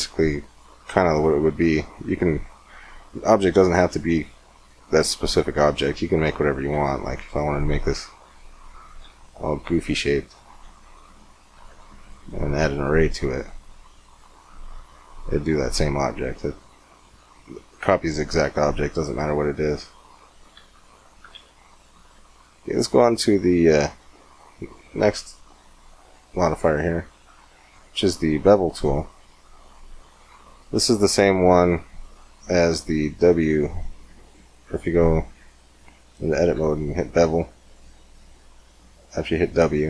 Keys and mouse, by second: 0.3-2.1 drag, 2.1-6.5 middle drag, 6.5 Tab, 7.5 g, 10.6 g, 11.4 Tab, 13.7-16.0 drag, 17.5-18.9 drag, 19.3 click, 20.3 x, 21.1 shift+a, 26.2-28.5 drag, 28.5-32.0 middle drag, 32.8 w, 34.1-35.1 drag, 35.1 Tab, 36.2-38.3 drag, 36.3 w.